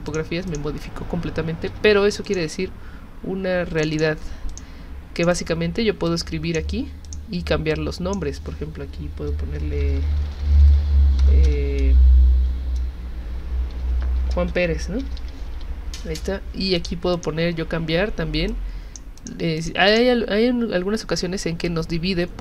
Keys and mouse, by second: 0.1 click, 0.5 click, 1.7 v, 2.2 click, 3.8 click, 3.9 click, 4.5 click, 5.2 click, 5.3 click, 6.1 click, 7.0 click, 7.7 click, 9.6-11.5 typing, 13.5-16.4 typing, 16.8 click, 17.1 click, 18.5 click, 19.2 click, 19.6 click, 19.9 click, 21.7 click.